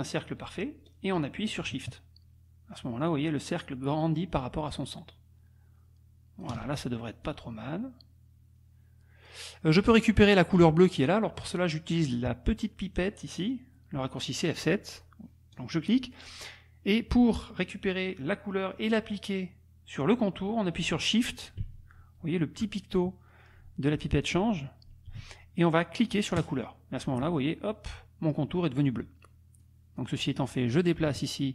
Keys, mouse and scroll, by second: 7.3-9.5 drag, 15.6 click, 26.5 shift+click, 28.8 click, 29.6-31.5 drag.